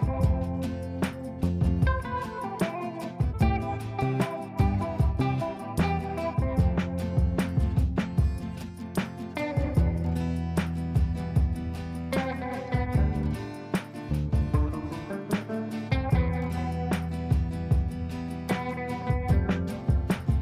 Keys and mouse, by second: 0.5 shift+click, 1.1 c, 1.5 click, 2.6 h, 2.8-3.7 click, 3.8 space, 4.4-6.9 drag, 6.9 ctrl+right click, 7.5 click, 7.9 ctrl+a, 12.0 shift+space, 12.4 shift+u, 12.8 shift+space, 13.1 Return, 15.4 space, 19.0 ctrl+space.